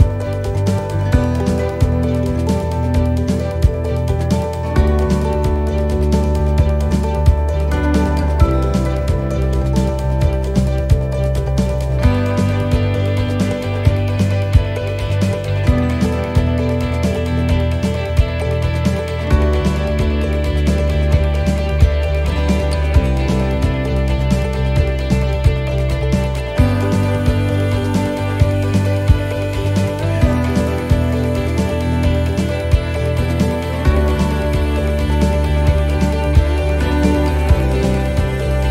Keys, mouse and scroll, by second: 0.4 right click, 1.2 click, 2.5 right click, 3.3 click, 4.3 right click, 5.1 click, 6.1 right click, 7.0 click, 8.1 right click, 9.0 click, 10.1 right click, 10.9 click, 12.1 right click, 13.0 click, 14.1 right click, 14.9 click, 16.0 right click, 17.0 click, 18.2 right click, 19.2 click, 20.5 right click, 21.2 click, 22.4 right click, 23.3 click, 24.5 right click, 25.4 click, 27.1 right click, 27.4-28.4 scroll down 6, 28.5 click, 29.7-30.4 scroll up 7, 30.6 middle click, 33.3 scroll down 3, 33.7 middle click, 35.2-35.7 scroll up 2, 35.6 middle click, 35.9 scroll down 2, 37.0 click.